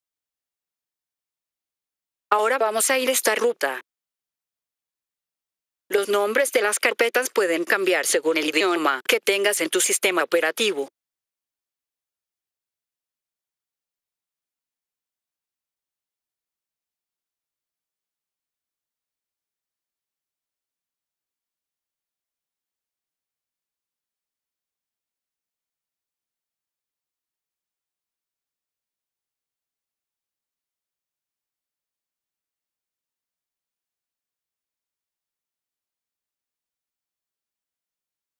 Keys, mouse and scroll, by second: 1.7 F3, 2.2 click, 3.4 click, 5.1 F3, 5.8 click, 11.8 F3, 12.4 click, 15.5 click, 16.0 click, 17.3 F3, 18.2 click, 19.1 click, 19.4 click, 21.5 F3, 22.5 click, 22.8 click, 24.1 F3, 26.4 click, 26.7 click, 27.9 F3, 29.5 click, 29.8 click, 30.9 F3, 33.4 click, 33.6 click, 34.9 F3, 37.5 right click.